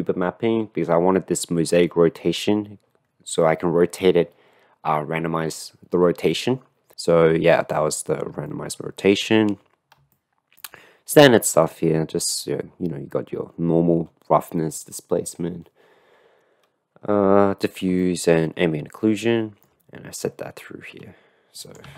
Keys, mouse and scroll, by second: 8.6-9.3 shift+middle drag, 10.2 shift+middle click, 10.5 shift+click, 18.0 shift+middle click, 19.7-21.7 shift+middle drag, 21.9 ctrl+middle click.